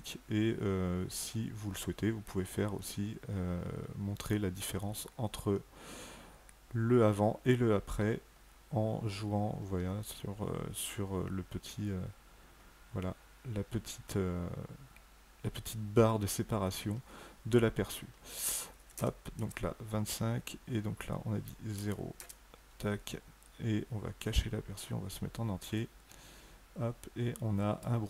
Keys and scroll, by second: 18.6 KP_2, 18.9 KP_5, 19.2 Tab, 21.6 KP_0, 22.0 Tab.